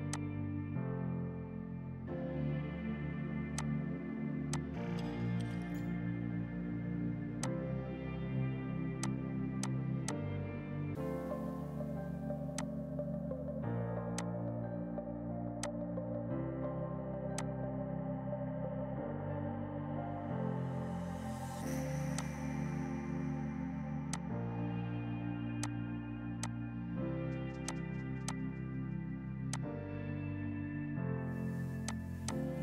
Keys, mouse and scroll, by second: 5.6 ctrl+right click, 6.6 F3, 7.4 F2, 7.5 click, 7.6 right click, 9.0 click, 9.6 shift+click, 12.6 click, 13.2 ctrl+right click, 14.2 click, 17.4 alt+click, 18.1 alt+right click, 20.1 right click, 21.0 F4, 21.7 shift+Page_Down, 22.2 click, 23.9 F2, 24.1 click, 26.5 ctrl+click, 27.4 space, 27.7 shift+click, 28.0 e, 28.3 click, 31.0 right click, 31.9 click, 32.1 e, 32.4 click.